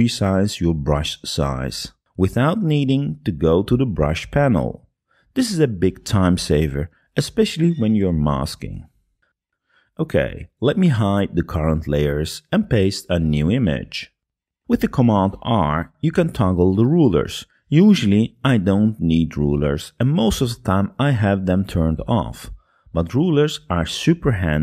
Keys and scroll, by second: 0.7 ], 11.8 p, 12.9 super+v, 17.2 super+r.